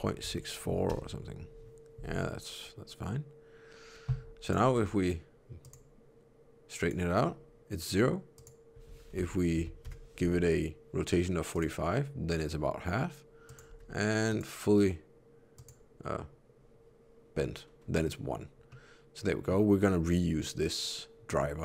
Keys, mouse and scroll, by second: 4.3 click, 4.5 r, 6.7 click, 8.3 click, 8.8 r, 11.4 click, 13.4 click, 13.6 r, 15.4 click, 18.6 middle click, 21.3 middle click.